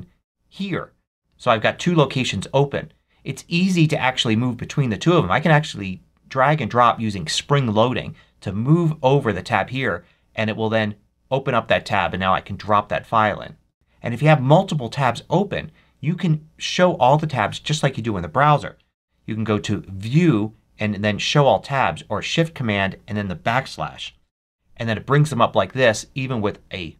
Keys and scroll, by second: 13.5 Escape, 23.9 shift+super+\.